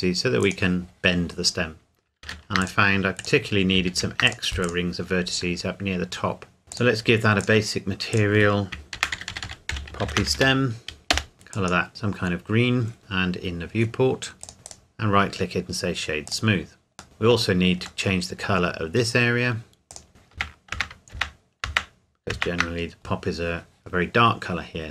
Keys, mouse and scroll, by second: 1.6-2.1 scroll up 1, 2.2 ctrl+r, 2.6 click, 3.9 ctrl+r, 4.3 click, 6.1-6.6 scroll up 1, 6.7 click, 9.0-10.4 typing, 11.1 Return, 11.3 click, 12.2-14.4 scroll down 1, 14.4 click, 14.7 right click, 16.3 click, 17.0 Tab, 18.0 middle click, 18.7-19.9 scroll up 1, 19.9 click, 20.3 ctrl+KP_Add, 24.2-24.9 scroll up 1.